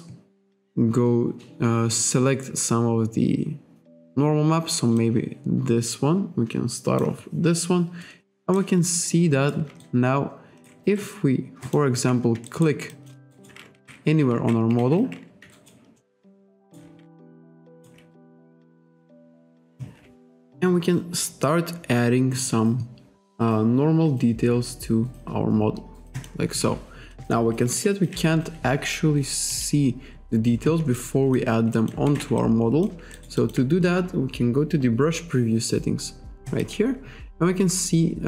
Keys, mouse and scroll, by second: 5.0 click, 8.6 ctrl+right click, 9.9 ctrl+right click, 11.7 click, 12.5 alt+right click, 12.9 alt+click, 13.4 alt+right click, 13.8 ctrl+z, 14.4 ctrl+z, 14.8 ctrl+z, 15.6 alt+right click, 16.0 alt+middle click, 16.3 alt+click, 16.7 alt+right click, 17.7 alt+right click, 18.9 KP_5, 23.8-24.2 scroll down 1, 24.3-24.6 scroll down 2, 26.2 click, 28.1 ctrl+z, 29.6 click, 31.0 alt+click, 31.8 alt+click, 32.1 ctrl+z, 32.4 alt+click, 33.2 alt+right click, 36.5 click.